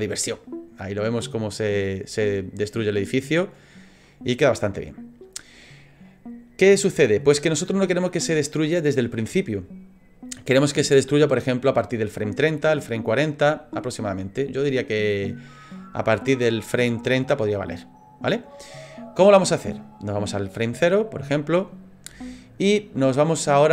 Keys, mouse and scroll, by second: 0.1 click, 4.5 click, 5.2 click, 6.1 middle click, 14.4 click, 20.2 click.